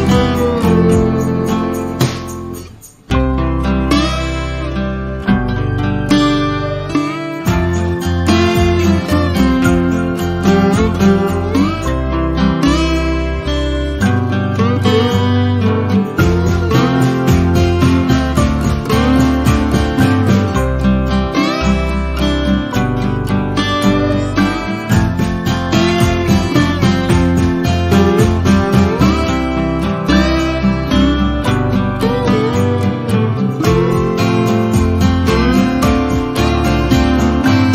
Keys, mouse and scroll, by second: 0.2 shift+click, 1.9 ctrl+z, 2.1 click, 2.5 ctrl+d, 2.9 shift+click, 4.0 click, 4.3 Delete, 4.6 z, 4.8 click, 5.1 F1, 5.3 click, 5.5 F2, 6.5 ctrl+alt+click, 7.3 click, 7.6 Delete, 8.7-9.7 drag, 10.8 shift+right click, 11.8 ctrl+alt+click, 12.6 ctrl+alt+click, 13.6 ctrl+alt+click, 15.7-16.9 click, 16.6 ctrl+click, 16.9 ctrl+Delete, 17.3 F1, 18.3-19.2 drag, 23.0 shift+right click, 23.7 F1, 24.7-25.4 click, 25.3 Delete, 25.8 ctrl+scroll up 1, 26.7 ctrl+alt+click, 27.2-27.9 click, 27.9 Delete, 29.0-29.9 click, 30.0 ctrl+scroll down 1, 31.5 ctrl+scroll up 1, 31.9 F1, 32.9-33.8 drag, 36.7 click, 36.9 shift+right click.